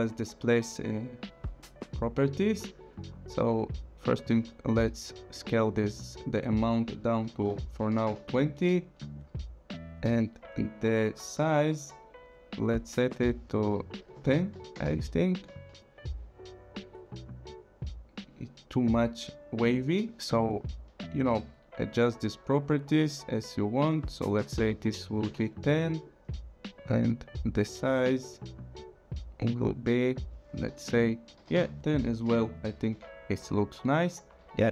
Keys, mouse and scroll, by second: 1.5 click, 5.3 click, 7.2 KP_2, 7.3 KP_0, 8.1 Return, 9.1 click, 13.7 click, 14.1 KP_1, 14.1 KP_0, 14.7 Return, 16.7 click, 21.3 click, 24.4 KP_1, 24.6 KP_0, 25.2 Return, 26.0 click, 31.4 KP_1, 31.6 KP_0, 32.1 Return.